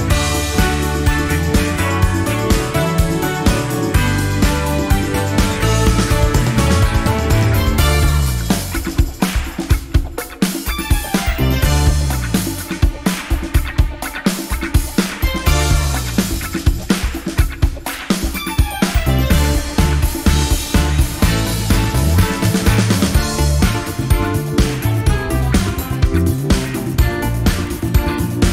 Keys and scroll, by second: 2.4 F1, 2.7-3.3 typing, 5.9 F7, 6.3 F1, 9.5 space, 9.9 shift+F6, 13.4 F1, 14.4-15.3 typing, 15.9 shift+F6, 17.9 F1, 21.8-22.5 typing, 23.0 shift+F6, 24.2 BackSpace.